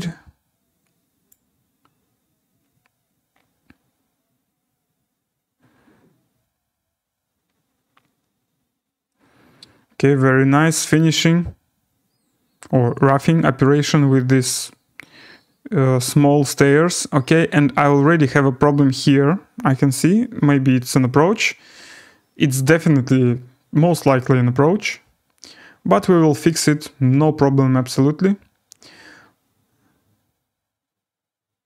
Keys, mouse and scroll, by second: 1.3 click, 10.4 scroll.